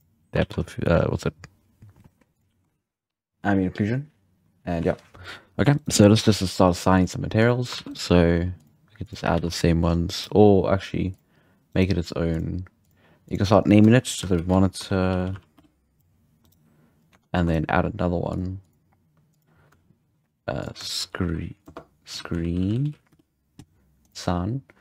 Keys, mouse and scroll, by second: 0.3 alt+a, 0.6 scroll down 3, 0.9-2.1 scroll up 4, 2.3 click, 5.7-7.5 right drag, 6.9-7.7 drag, 7.7 alt+a, 7.9-9.1 right drag, 8.5 click, 9.3 alt+a, 9.7 scroll down 1, 9.8-10.1 scroll up 3, 10.1-11.1 right drag, 11.1 click, 11.7-12.3 right drag, 12.3 click, 13.2-15.9 drag, 15.9-17.1 right drag, 17.1 Tab, 17.3 3, 17.5 right drag, 18.3-22.6 drag, 22.6 e, 24.0-24.8 drag, 24.0 e.